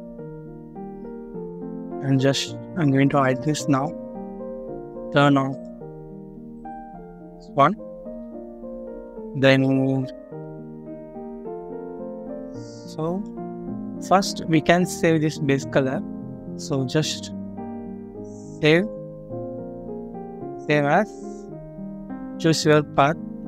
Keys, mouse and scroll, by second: 3.6 double click, 7.7 scroll down 1, 8.5 middle click, 8.9 scroll up 1, 9.5 middle click, 9.9 scroll up 1.